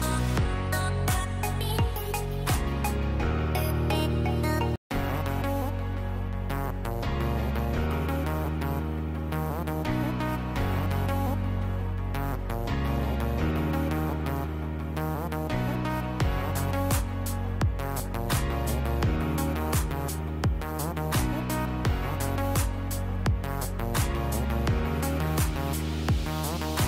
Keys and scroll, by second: 2.0 ctrl+y, 12.4-14.1 typing.